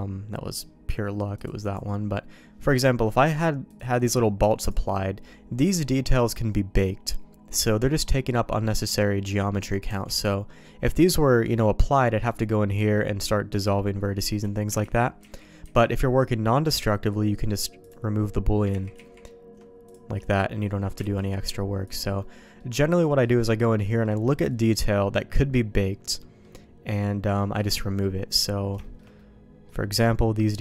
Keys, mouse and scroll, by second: 3.3 click, 9.8 Tab, 15.0 ctrl+z, 15.4 ctrl+z, 15.8 ctrl+z, 18.9 ctrl+z, 19.2 ctrl+z, 19.9 click, 21.2 alt+v, 22.2 middle click, 23.0 middle click, 23.8 middle click, 25.7 middle click, 26.9 middle click, 27.6 middle click, 28.8 shift+middle click, 29.1 middle click.